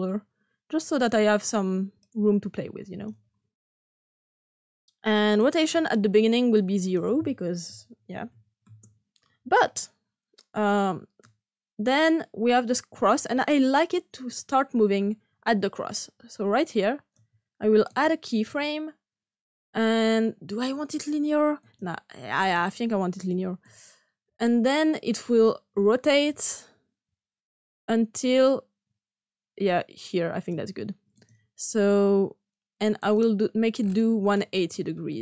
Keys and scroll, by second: 8.0 ), 8.6 Return.